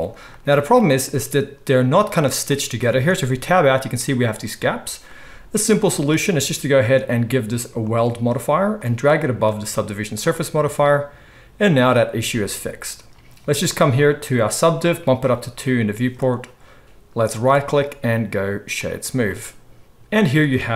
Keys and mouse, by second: 2.9 Tab, 9.5-15.2 middle drag, 15.2-20.7 drag, 17.4-20.7 middle drag, 17.4-20.7 right drag.